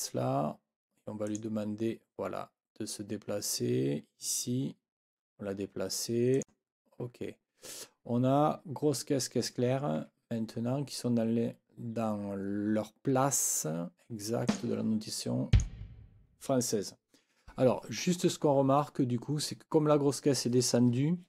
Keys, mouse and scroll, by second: 1.3 click, 6.3 click, 10.0 Escape, 14.5 click, 15.5 click.